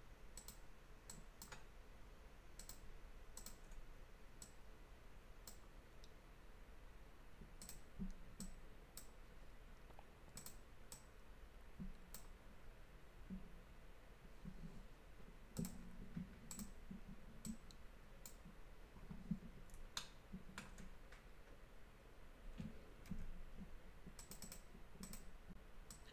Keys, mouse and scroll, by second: 0.4 click, 0.5 click, 1.1 click, 2.6 click, 2.8 click, 3.4 shift+click, 3.5 shift+click, 4.5 click, 7.7 click, 7.8 click, 8.4 click, 10.4 click, 10.5 click, 11.0 click, 15.6 click, 15.7 click, 16.5 click, 16.7 click, 17.5 click, 20.0 shift+middle click, 23.2 ctrl+r, 23.7-24.3 scroll up 1, 24.3 click, 24.5 click, 25.1 double click, 26.0 double click.